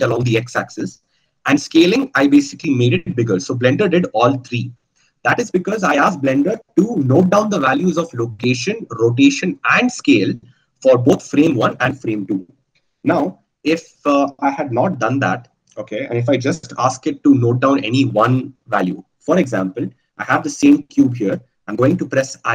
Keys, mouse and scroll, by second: 15.7 ctrl+z.